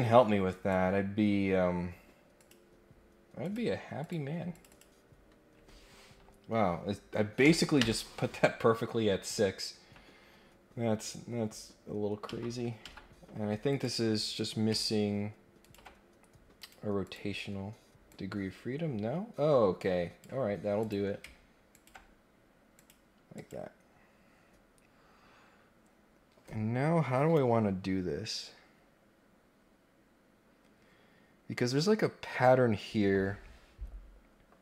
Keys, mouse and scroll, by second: 0.4 right click, 2.3 click, 4.0 click, 4.5 click, 8.9 scroll down 2, 9.2 scroll up 2, 12.2 Escape, 12.8 Escape, 13.7 click, 15.6 ctrl+click, 16.5 click, 17.0 click, 18.0-20.2 drag, 20.7 click, 21.7 ctrl+click, 22.7 click, 23.3 click.